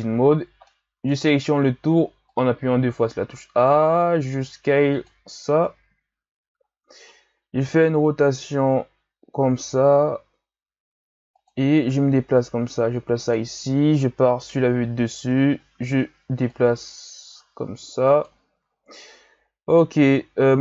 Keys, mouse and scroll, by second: 0.7 middle click, 1.2 a, 1.4 a, 2.3-3.6 drag, 3.6 s, 5.5 KP_1, 6.0-6.7 scroll up 3, 6.7-7.7 ctrl+scroll down 1, 7.7 r, 12.0 g, 14.2 KP_7, 15.3-16.5 scroll down 2, 16.5-18.6 drag, 18.6 z, 19.7-20.2 scroll up 3, 20.2-20.6 scroll down 4.